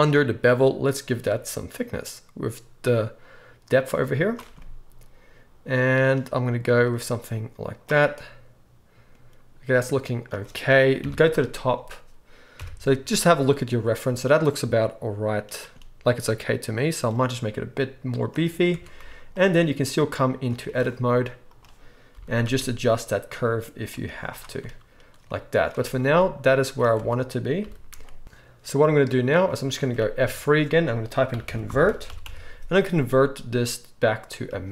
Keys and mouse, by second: 11.0 KP_7, 12.6 KP_1, 18.7 Tab, 19.0 z, 20.4-21.5 middle drag, 21.5-24.6 right drag, 22.1 g, 24.0 z, 24.6 Tab, 24.6 click, 25.5 shift+right click, 26.0-30.2 middle drag, 26.9 Tab, 27.6 g, 30.2 F3, 30.2-34.7 drag.